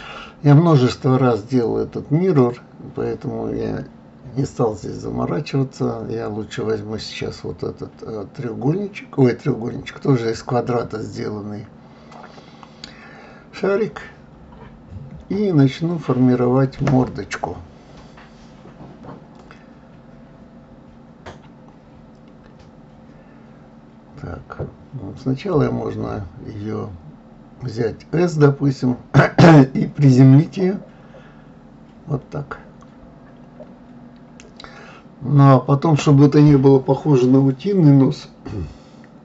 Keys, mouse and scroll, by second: 0.5 click, 4.0 g, 7.1-8.2 middle drag, 8.2-9.7 scroll down 3, 9.7 scroll down 1, 9.8 KP_3, 11.0 click, 12.4 d, 13.7 g, 17.0-20.0 middle drag, 22.2-23.6 middle drag, 23.6 scroll up 3, 24.3-27.4 middle drag, 32.9-36.1 middle drag.